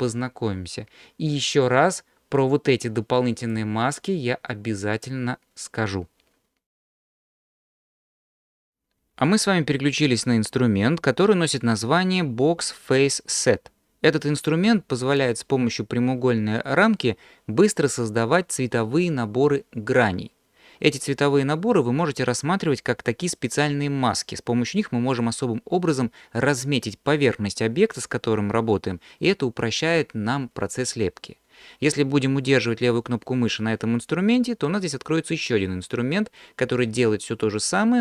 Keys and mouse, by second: 2.7-3.5 drag, 33.5-38.0 drag.